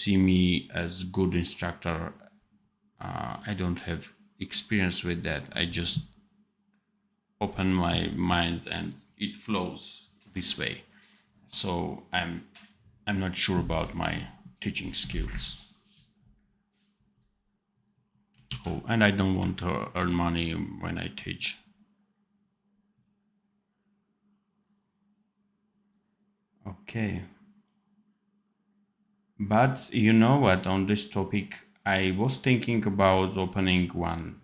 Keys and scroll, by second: 18.4 ctrl+s.